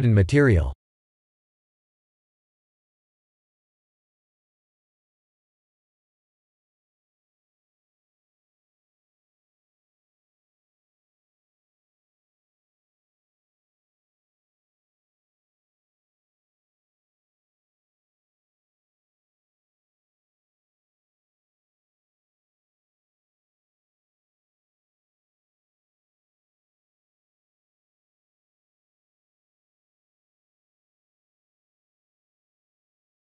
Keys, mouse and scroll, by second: 3.2 click, 3.6-5.4 scroll down 8, 5.4-6.0 scroll down 1, 6.0 click, 12.5 click, 13.2 click, 15.2 shift+middle click, 16.4-16.9 scroll up 9, 17.6 click, 20.0 click, 22.5 click, 23.8 s, 28.3-31.6 scroll up 3.